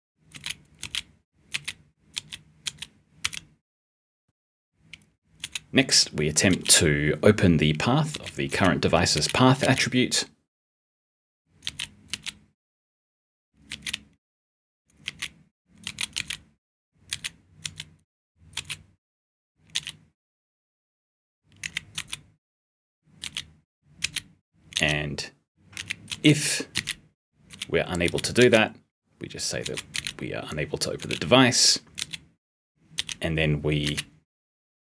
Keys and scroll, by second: 0.2 g, 0.7 d, 1.4 g, 2.1 s, 3.1 r, 5.3 b, 6.4 l, 8.0 d, 8.4 p, 9.1 t, 9.5 b, 11.6 t, 12.0 d, 13.6 s, 15.0-18.5 typing, 19.7 p, 21.5 a, 21.9 r, 23.1-26.6 typing, 28.0 p, 33.8 *.